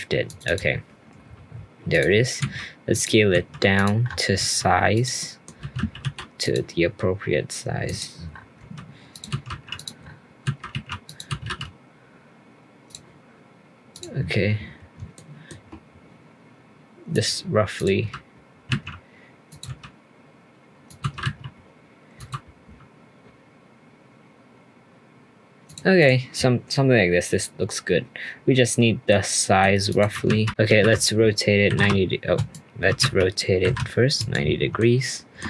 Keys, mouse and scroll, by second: 1.9 click, 3.3 s, 4.0-4.4 scroll up 4, 4.4 s, 5.2-5.6 middle drag, 5.6 g, 7.8 click, 8.3-8.6 scroll up 2, 8.6 s, 9.3 g, 10.0-10.4 scroll up 3, 10.4 g, 11.3 g, 13.9 click, 14.3-15.1 scroll up 2, 15.1-17.1 shift+middle drag, 17.1 click, 17.7 click, 18.0 g, 19.6 s, 21.0 g, 22.1 g, 26.0 click, 27.3-27.9 scroll down 1, 27.9-29.1 scroll down 1, 29.1-29.9 middle drag, 29.9 click, 30.5 ctrl+z, 30.8 r, 32.9 r, 34.8-35.4 shift+middle drag.